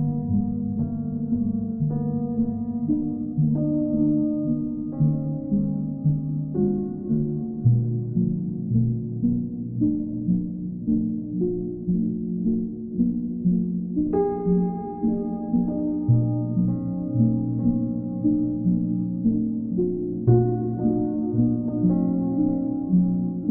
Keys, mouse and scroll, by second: 2.9 click, 3.7 click, 4.0 shift+click, 4.6 alt+click, 5.2 alt+click, 8.3 click, 9.9 click, 10.4 q, 11.3 click, 11.7 click, 12.0 shift+click, 12.6 shift+click, 13.3 click, 14.2 z, 15.3 click, 16.9 click, 18.2 shift+click, 19.6 click, 19.8 click, 20.9 alt+click, 21.5 click, 23.3 right click.